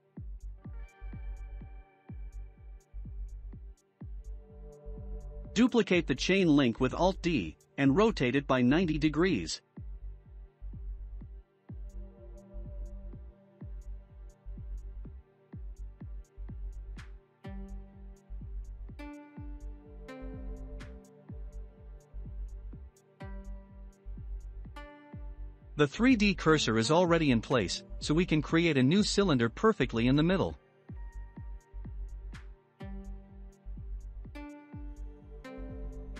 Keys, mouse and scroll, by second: 0.8 scroll down 4, 1.2-2.9 shift+middle drag, 2.9-4.0 scroll up 4, 4.0 alt+d, 7.1 r, 10.0-11.4 middle drag, 11.4 click, 13.8 click, 14.3-14.8 scroll down 5, 14.8-15.7 shift+middle drag, 15.7-16.4 scroll down 5, 16.4-17.7 shift+middle drag, 17.7-20.6 scroll down 5, 20.6-21.4 scroll up 8, 21.6-22.7 middle drag, 22.7 scroll up 1, 25.1 shift+a, 28.3-29.7 scroll down 5, 29.7-32.7 drag, 33.1 click, 34.3 s.